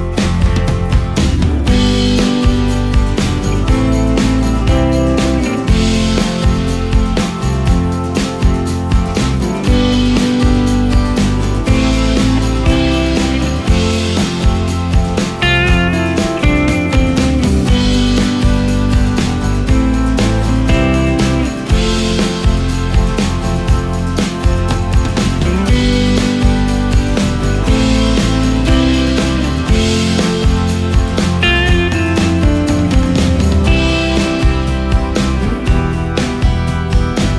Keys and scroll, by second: 2.1 ctrl+space, 8.0 space, 9.3 space, 11.9 space, 18.2 space, 22.2 ctrl+z, 24.2 ctrl+z, 26.5 |.